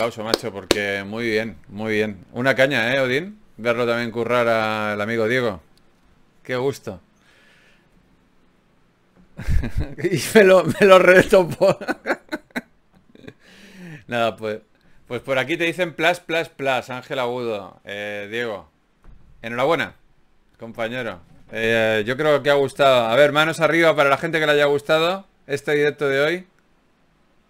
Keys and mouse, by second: 2.0 Tab, 18.1 Tab.